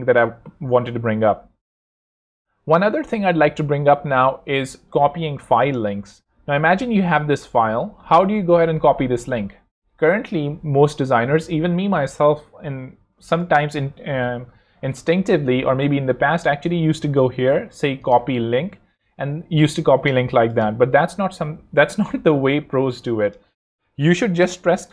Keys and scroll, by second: 24.8 super+l.